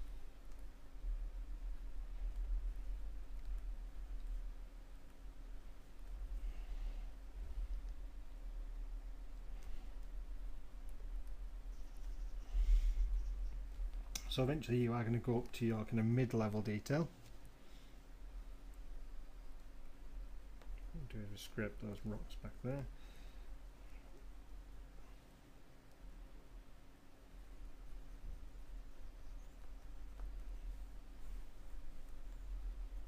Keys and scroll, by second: 1.0 m, 31.5 [.